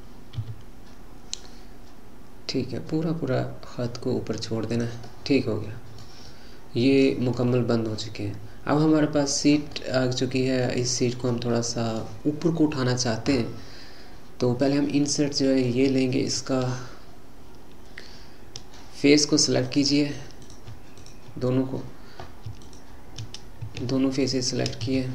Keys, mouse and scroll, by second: 5.0-14.6 middle drag, 14.6-15.1 scroll down 1, 15.1-16.3 middle drag, 16.3 click, 19.6-20.5 drag, 21.0 click, 21.5-22.5 scroll down 1, 22.6 click, 24.2 shift+click.